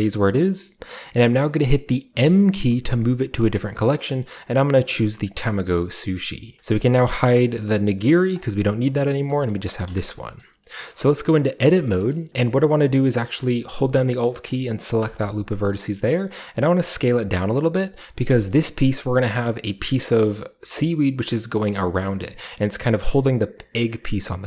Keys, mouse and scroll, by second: 5.3 click, 8.3 click, 10.1-13.7 shift+middle drag, 11.6 Tab, 12.4-13.7 shift+scroll up 1, 13.7 a, 15.4-15.8 alt+scroll down 1, 15.5-17.8 alt+middle drag, 15.8-16.6 alt+scroll up 1, 16.6 alt+scroll up 1, 16.7 s, 17.8 click, 18.5-19.5 shift+scroll up 2, 19.5-20.2 shift+scroll up 1, 20.4-21.5 middle drag, 21.4-22.4 scroll down 1, 21.7 middle click, 22.1-24.3 middle drag, 22.4-24.3 scroll up 1.